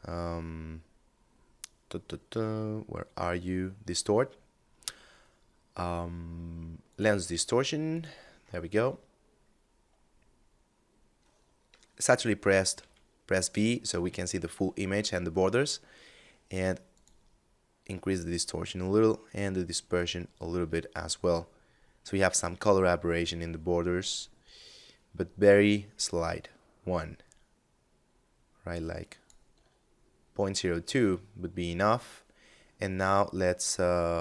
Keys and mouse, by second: 6.1 click, 16.1 click, 19.1 click, 22.5 shift+click, 33.7 click.